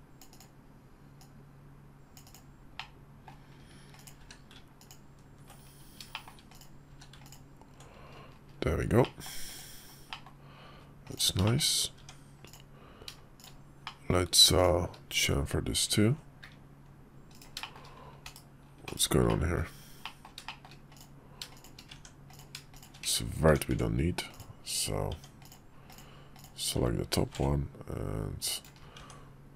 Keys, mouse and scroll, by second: 0.9-2.1 drag, 2.5-3.0 middle drag, 3.7 click, 3.9 q, 5.8 shift+middle drag, 6.2 click, 6.6 q, 8.7 middle drag, 9.2 click, 9.8 middle click, 10.8 click, 11.2 shift+middle click, 11.7 Tab, 12.2 click, 13.1 shift+click, 13.6 middle click, 14.3 shift+click, 15.7 ctrl+b, 17.3 shift+middle click, 17.9 /, 18.6 /, 19.0 middle click, 19.7 middle click, 20.2 shift+middle click, 20.7 click, 21.2 shift+click, 21.6 Tab, 22.0 click, 22.5 shift+click, 22.7 1, 23.2 Tab, 24.0 Tab, 24.0 click, 25.1 Tab, 25.1 click, 25.6 click, 26.1 click, 26.9 ctrl+b, 28.7 Tab.